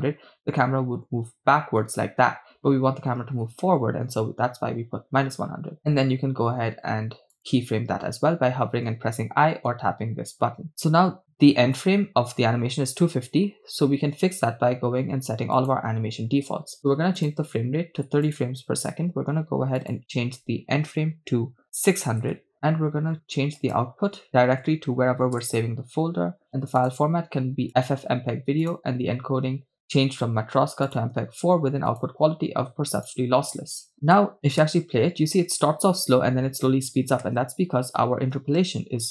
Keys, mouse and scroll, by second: 0.0 middle click, 7.4 click, 10.7-11.4 scroll down 2, 15.6-16.7 drag, 17.2-18.9 drag, 19.8 scroll down 2, 20.0-22.3 drag, 22.3 0, 23.6-25.5 drag, 24.9 /, 26.2-26.8 scroll down 1, 26.8-27.4 scroll down 1, 27.4 click, 28.3-28.6 scroll down 1, 28.9 click, 29.1-29.8 scroll down 1, 30.3 click, 31.9-33.1 drag, 34.5 KP_0, 34.7 shift+space, 37.4 shift+space.